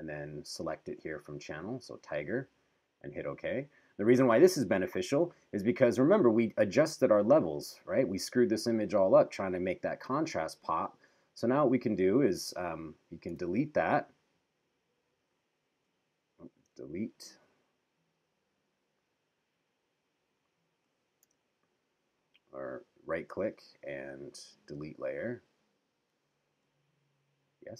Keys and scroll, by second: 13.3 BackSpace, 16.5 BackSpace, 21.2 BackSpace.